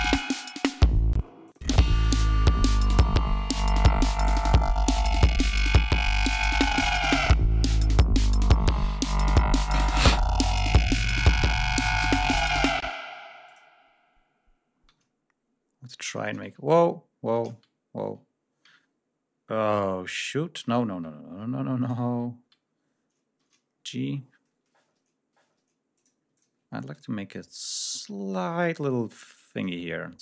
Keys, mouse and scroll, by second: 1.5 space, 1.8 click, 2.9 ctrl+scroll up 2, 3.3 ctrl+scroll down 2, 9.5 ctrl+scroll up 2, 10.2 ctrl+scroll up 2, 13.3 space, 13.6 s, 13.8 click, 15.3 d, 17.0 ctrl+y, 17.8 ctrl+y, 19.0 s, 20.9 ctrl+y, 23.8 g, 25.7 click, 26.1 ctrl+click, 26.7 ctrl+click, 27.6 ctrl+click, 28.4 click.